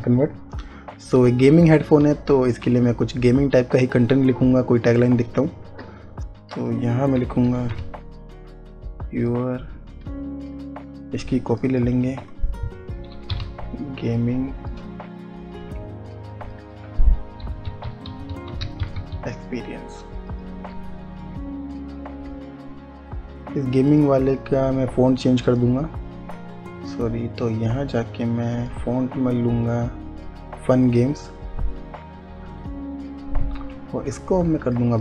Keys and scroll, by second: 2.5 space, 7.6 y, 7.9 o, 12.6-14.3 typing, 17.9-19.6 typing.